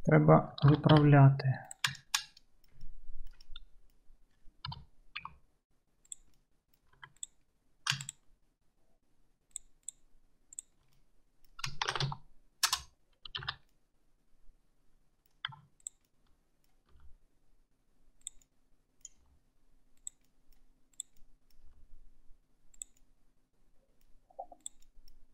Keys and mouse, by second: 0.7 alt+z, 1.0 2, 1.7 click, 1.8-3.7 shift+middle drag, 4.7 KP_3, 5.2 g, 7.1 2, 7.2 click, 8.1 shift+click, 9.9 shift+click, 10.0-15.9 shift+middle drag, 10.6 shift+click, 11.9 shift+e, 13.4 alt+z, 15.6 1, 15.9 click, 16.0-21.0 middle drag, 17.0 g, 19.3 g, 21.0 click, 21.1-25.3 middle drag, 21.8 g.